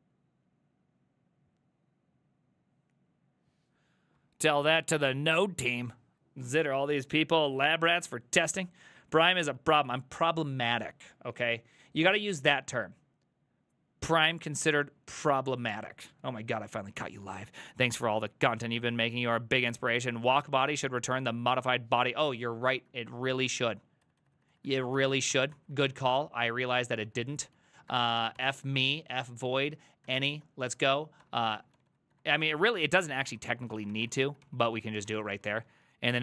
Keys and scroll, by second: 33.3-34.7 typing.